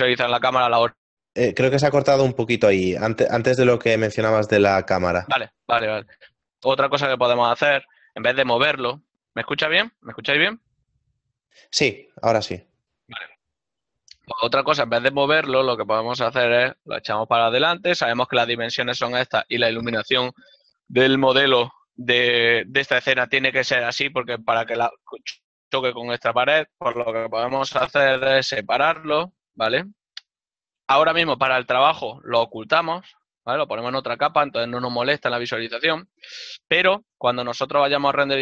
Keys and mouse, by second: 3.3 click, 8.3 ctrl+z, 15.9 click, 28.3 middle click, 31.8 Tab, 33.0 m, 36.1 KP_0.